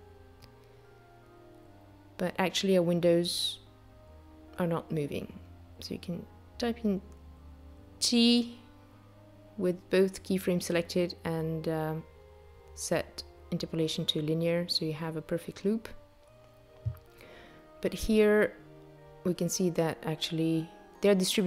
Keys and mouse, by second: 1.8 space, 3.9 t, 6.4 space, 19.2 space, 20.2 click.